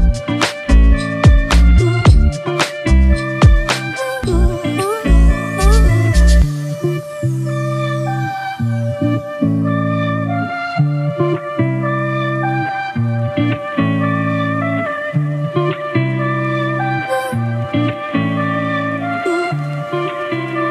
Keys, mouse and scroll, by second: 5.1 alt+shift+click, 7.9 Return, 7.9 alt+shift+click, 8.8 ctrl+t, 11.9 Return.